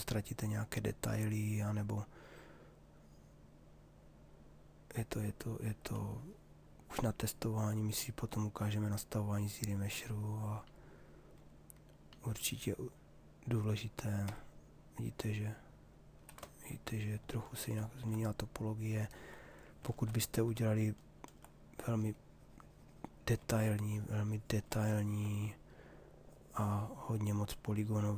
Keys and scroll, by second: 13.8 Escape, 19.4 ctrl+z.